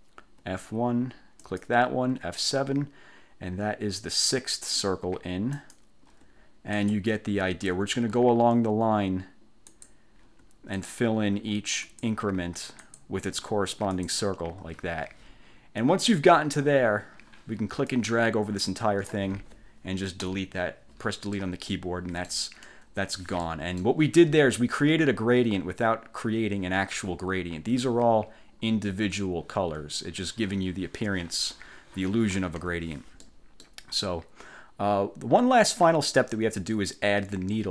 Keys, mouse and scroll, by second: 0.3 F1, 1.5 click, 2.2 F7, 5.6 click, 6.2 F1, 6.8 click, 7.4 F7, 9.8 click, 10.4 F1, 10.9 click, 11.4 F7, 12.0 click, 12.5 F1, 13.0 click, 13.4 F7, 14.1 click, 14.6 F1, 16.2 click, 18.0-19.4 drag, 20.4 Delete, 21.5-22.6 middle drag, 22.8 1, 23.6 click, 27.2-27.6 ctrl+scroll up 2, 32.7 1, 33.3 middle click, 33.8 click.